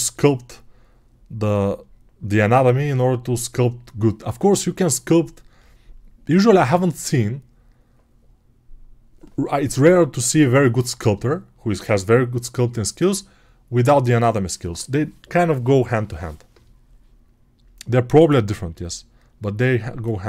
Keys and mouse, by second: 20.2 right click.